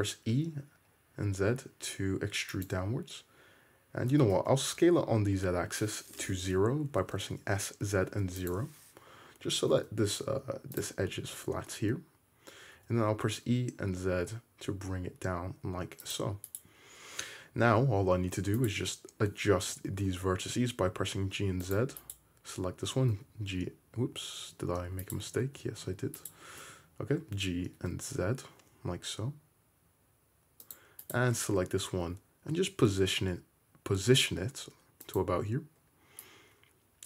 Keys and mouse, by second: 4.2 s, 9.6 g, 12.9 e, 16.6 click, 18.7 click, 19.7 g, 22.1 click, 23.0 g, 25.6 ctrl+z, 26.4 click, 27.3 g, 31.2 click, 32.2 g.